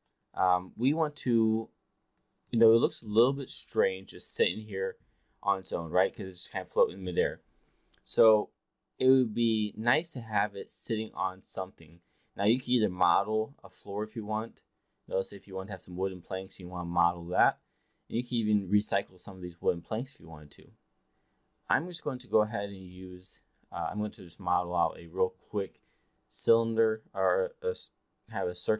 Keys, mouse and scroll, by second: 0.0 alt+middle drag, 0.4-1.6 alt+drag, 2.2-2.5 alt+drag, 22.3-22.7 drag, 23.8-24.2 drag.